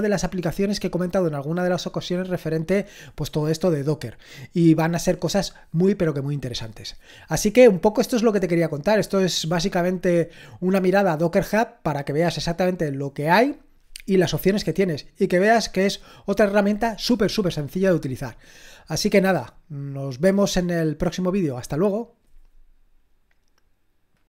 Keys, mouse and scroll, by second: 24.2 click.